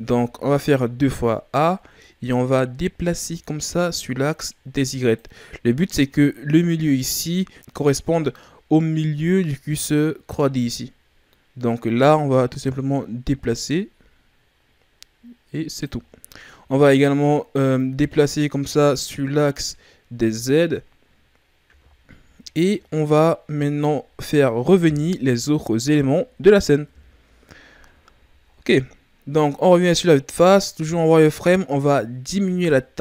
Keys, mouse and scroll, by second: 0.3 a, 1.4-2.4 shift+scroll up 7, 3.3 click, 5.5-7.5 scroll down 2, 7.5-10.7 scroll up 3, 11.8 click, 16.0-17.8 scroll down 4, 17.8 click, 21.7 z, 22.4-22.7 scroll down 4, 22.7 middle click, 23.5-24.1 scroll down 2, 24.1-25.2 ctrl+scroll up 4, 25.2 KP_Divide, 26.9 KP_1, 27.8-29.1 ctrl+scroll up 11, 30.3 z, 30.9 ctrl+scroll down 2, 31.4 scroll up 1, 32.4 s.